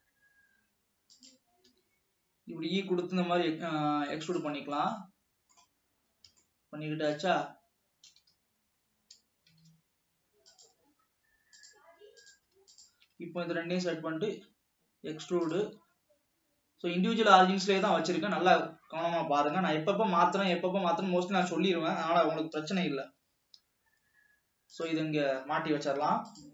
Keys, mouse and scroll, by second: 1.9 e, 4.9-6.0 middle drag, 6.0-6.9 scroll up 3, 6.9 scroll up 1, 7.2 shift+middle click, 7.9-8.6 scroll up 2, 8.9 g, 12.3 click, 12.8 shift+click, 13.6 e, 14.3 s, 15.8 e, 18.4-19.1 scroll down 4, 19.1 alt+a, 20.4 l, 20.6 click, 22.0-23.3 scroll up 1, 23.3 g, 25.2-26.5 scroll down 3.